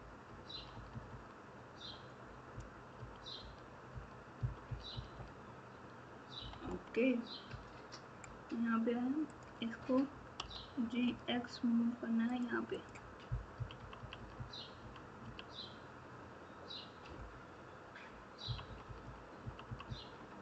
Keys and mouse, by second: 0.2 KP_6, 0.5 KP_6, 0.7 KP_6, 2.9-5.1 typing, 6.3 KP_Subtract, 6.6 KP_Subtract, 7.4 KP_6, 10.4 g, 12.7 click, 13.5 KP_6, 13.7 KP_6, 18.4 KP_6.